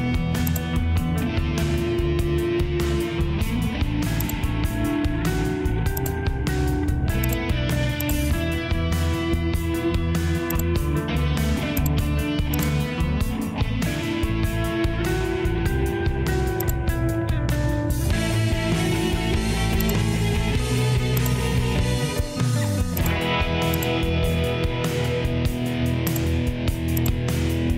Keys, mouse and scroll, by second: 1.8 Escape, 15.4 Return.